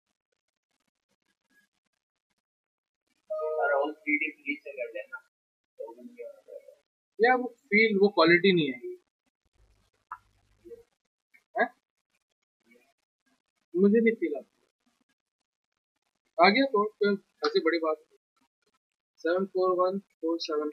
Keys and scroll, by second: 18.7-20.7 typing.